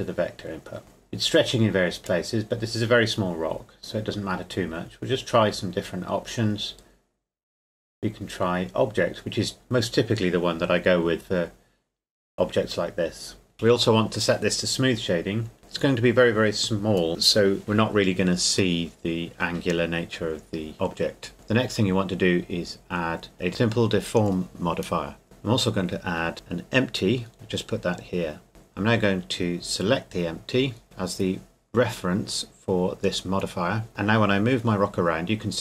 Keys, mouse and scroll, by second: 0.8 middle click, 1.4-2.6 scroll up 2, 2.6 scroll up 1, 2.7-5.9 drag, 6.6-9.1 middle drag, 9.6-11.9 drag, 11.9 middle click, 16.6 s, 19.0 click, 20.0 middle click, 20.8 Tab, 21.3 click, 24.4 click, 26.0 shift+a, 27.3 click, 28.5 right click, 29.6 click, 33.7 right click, 33.9 g.